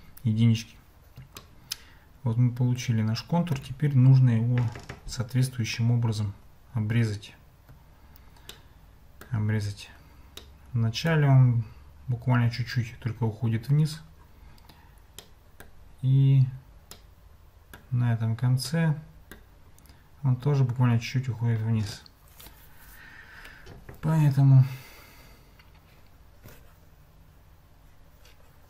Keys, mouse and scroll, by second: 1.4-3.7 shift+middle drag, 8.6 middle click, 10.5 middle click, 15.3-15.6 middle drag, 17.1 middle click, 18.8 middle click.